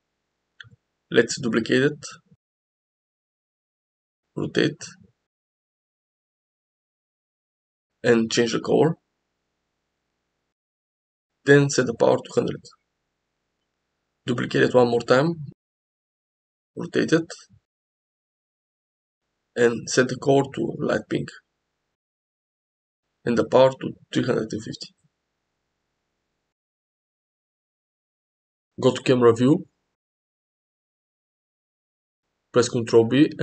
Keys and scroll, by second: 2.1 shift+d, 3.2 r, 12.8 0, 14.4 shift+d, 16.6 r, 28.1 KP_0, 32.3 g.